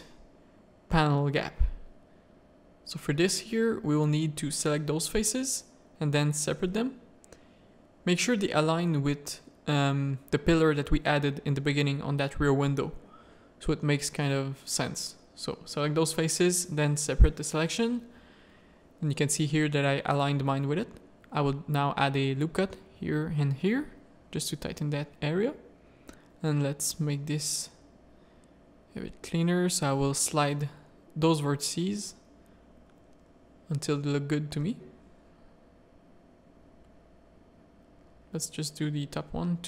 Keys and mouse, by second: 0.5 middle click, 1.3 z, 1.4 a, 1.5 click, 1.9 3, 2.7 click, 3.7 click, 4.2 z, 5.3 click, 6.5-8.0 middle drag, 6.9 1, 8.0 z, 8.3 c, 10.2 click, 10.8 ctrl+click, 11.2 z, 11.6 g, 12.7 3, 13.2 alt+click, 14.1 h, 14.8 l, 15.7 alt+h, 16.2 click, 17.1 Tab, 17.4 alt+a, 17.7 z, 19.6 Tab, 19.8 ctrl+r, 21.2 Tab, 21.5 Tab, 21.9 ctrl+r, 23.2 Tab, 23.7 middle click, 24.1 alt+a, 25.0 Tab, 25.4 shift+middle click, 26.4 click, 27.1 g, 27.7 click, 28.7 Tab, 28.7 click, 29.4 Tab, 29.8 z, 29.9 a, 30.2 1, 30.7 Tab, 31.0 z, 31.7 Tab, 33.3 ctrl+click, 33.7 g, 36.8 click, 37.5 g.